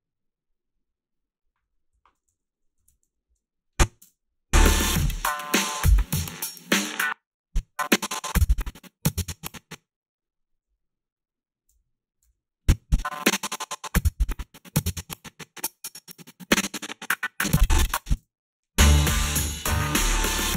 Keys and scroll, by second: 1.9 o, 2.8 ctrl+r, 4.0 space, 6.8 space, 12.3 ,, 18.2 space.